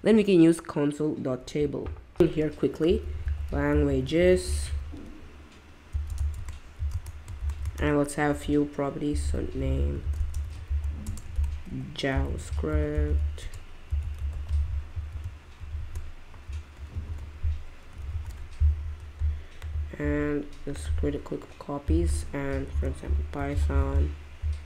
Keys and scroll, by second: 2.2-7.4 typing, 6.9 Return, 8.8-11.3 typing, 12.7-14.8 typing, 14.9 Down, 15.6 shift+Up, 15.7 shift+Up, 16.9 alt+shift+Down, 18.1 alt+shift+Down, 22.7-24.3 typing.